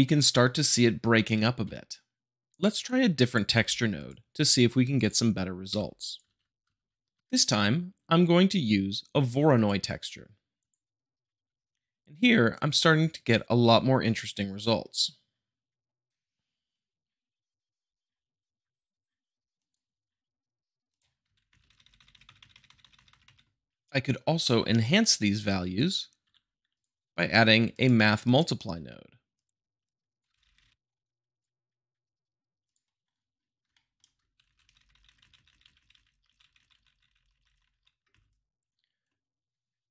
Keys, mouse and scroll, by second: 2.4-3.0 drag, 3.2 click, 3.5 g, 3.9-5.0 drag, 6.3 shift+a, 9.5-10.5 drag, 11.4 shift+middle click, 19.5-20.6 drag, 20.9 click, 21.4 shift+Left, 21.6 Right, 22.9 Right, 26.2 q, 26.7 click, 28.2-29.2 drag, 29.8 shift+click, 30.3 shift+Left, 30.4 Right, 33.1-33.6 middle drag, 33.6 shift+middle click, 34.4 shift+Left, 34.6 Right, 36.2 Right, 37.4 Right, 38.0 shift+Left, 39.8-39.9 middle drag.